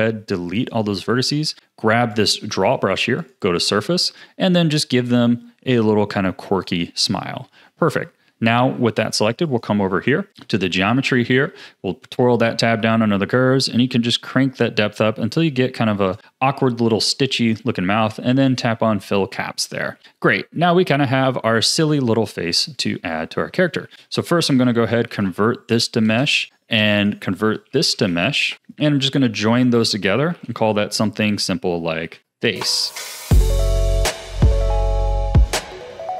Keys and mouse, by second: 3.2 click, 5.1-6.6 drag, 7.4 Tab, 9.5 click, 10.3-16.2 drag, 18.3 click, 19.9 a, 20.0-21.3 drag, 21.6 click, 22.2 click, 23.0 a, 23.8 ctrl+s, 24.4 space, 27.4 space, 30.3 ctrl+j, 31.2 F2, 32.9 click, 33.9-36.1 drag.